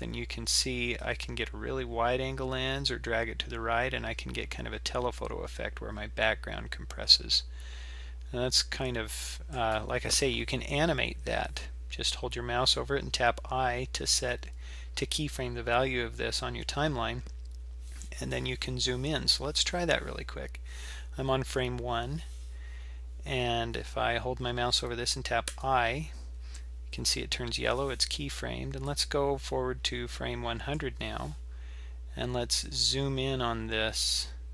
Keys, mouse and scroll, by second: 28.9-31.9 drag, 32.7-34.5 drag.